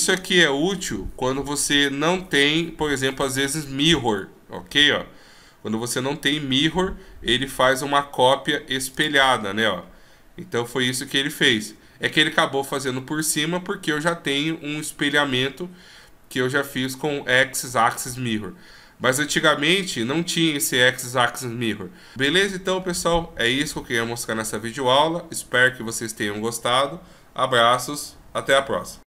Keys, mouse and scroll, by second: 11.1 ctrl+z.